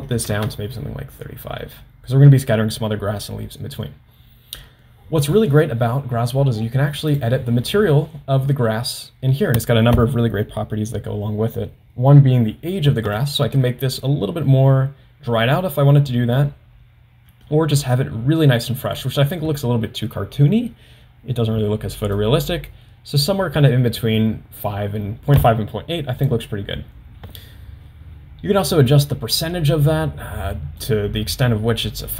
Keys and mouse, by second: 7.1 click, 13.3-19.1 drag, 22.1-26.5 drag, 28.7-31.0 drag.